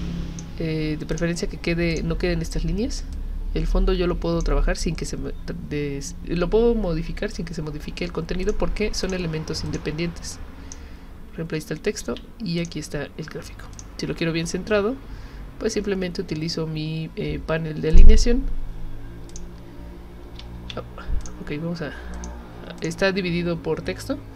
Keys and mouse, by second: 1.1 click, 1.9 click, 3.1-4.4 drag, 8.4 click, 9.0 click, 9.7 click, 10.3 click, 12.0 ctrl+z, 12.6 click, 13.7 shift+click, 17.9 click, 19.3 click, 20.5 ctrl+z, 21.2 click, 22.1 click, 22.8 click.